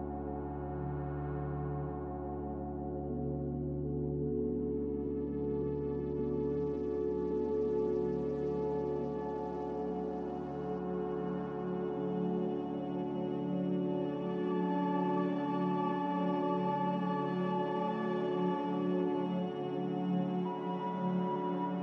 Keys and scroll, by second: 6.2 a, 9.6 ctrl+c, 10.8 ctrl+v.